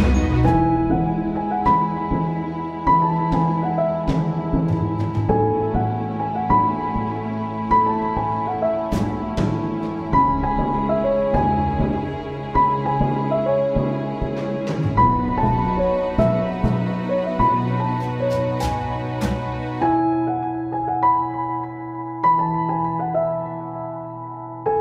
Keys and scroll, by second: 2.1 ctrl+z, 5.5 space, 8.1 space, 20.9 space.